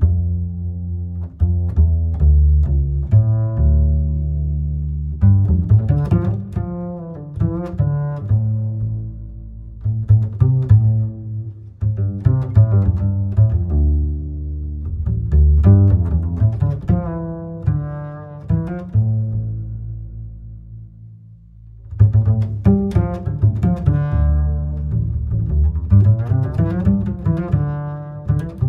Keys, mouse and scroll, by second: 3.2 drag, 6.1 drag, 9.1-12.3 shift+drag, 12.8-17.4 drag, 17.4-19.0 middle drag, 19.0-22.1 drag, 26.7-28.6 middle drag, 28.6 click.